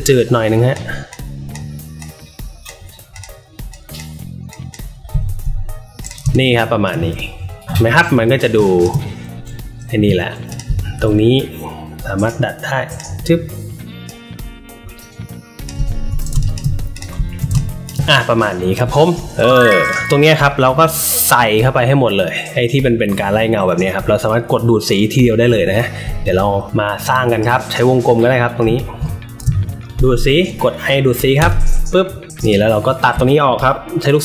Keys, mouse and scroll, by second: 0.4 click, 1.0 click, 1.9 click, 3.1 click, 3.6 click, 4.4 click, 5.1 alt+middle click, 5.1 alt+scroll up 1, 5.9 click, 6.1 space, 6.3 click, 7.8 alt+middle click, 8.4 space, 8.6 click, 9.9 a, 10.4 click, 10.8 alt+middle click, 10.8 alt+scroll, 12.2-12.9 drag, 14.0-15.6 drag, 15.8 alt+middle click, 15.8 alt+scroll up 1, 16.2 space, 16.3 click, 16.8 click, 17.1 alt+middle click, 17.1 alt+scroll up 1, 17.4 space, 17.5 click, 18.9 alt+middle click, 19.4 space, 19.4 click, 25.6 alt+middle click, 26.6-27.3 drag, 28.5-29.8 alt+shift+drag, 29.4 alt+shift+space, 31.3 click, 32.4 click.